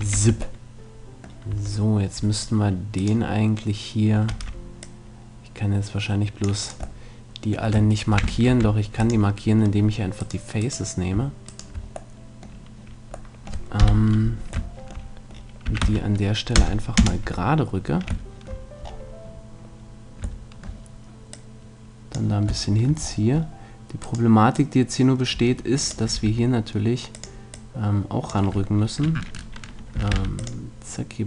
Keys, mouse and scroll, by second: 0.2 Tab, 1.5 Tab, 2.8 middle click, 3.0-4.8 right drag, 3.1-4.4 middle drag, 4.4 c, 6.7 right click, 7.0 middle click, 8.4 ctrl+\, 8.5 ctrl+Tab, 12.2-13.8 middle drag, 13.8 KP_7, 15.6 s, 21.3-23.4 drag, 23.4 middle click, 24.0-25.9 right drag, 24.6-26.2 drag, 26.1 r, 27.5-29.5 drag, 30.1 ctrl+r.